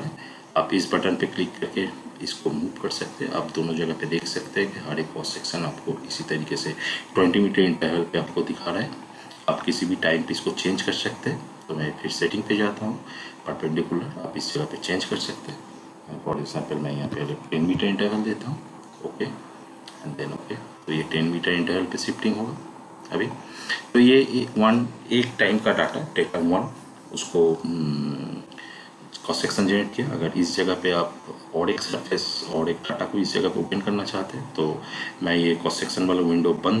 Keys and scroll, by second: 16.9 1, 17.5 0, 34.6 Down.